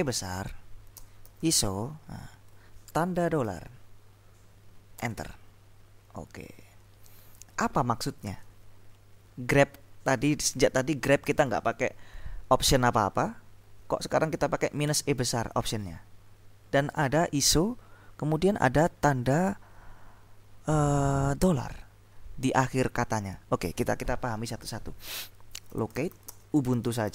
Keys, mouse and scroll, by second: 1.1-2.3 typing, 3.4 shift+0, 5.0 Return, 25.5-27.1 typing.